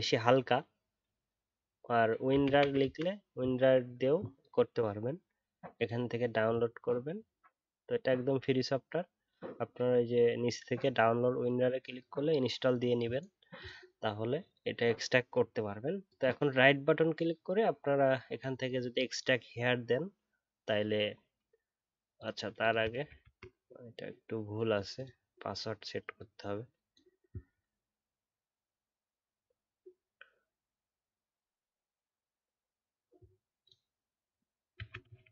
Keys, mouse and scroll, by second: 23.0 ctrl+d.